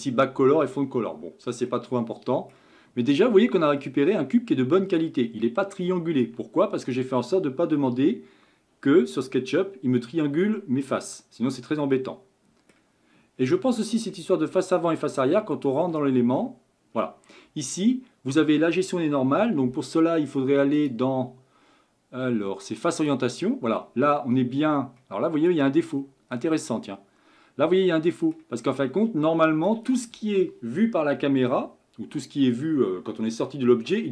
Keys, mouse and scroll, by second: 1.7-5.3 middle drag, 5.3-5.8 scroll up 4, 5.8-6.2 scroll down 1, 10.9-13.3 middle drag, 13.3-14.1 scroll up 10, 14.1-15.3 middle drag, 15.3-19.5 scroll up 22, 20.7-23.8 drag, 25.0 middle click, 25.9-26.8 scroll down 8, 26.8-28.6 middle drag, 28.6-29.1 scroll up 4, 29.1-32.2 middle drag.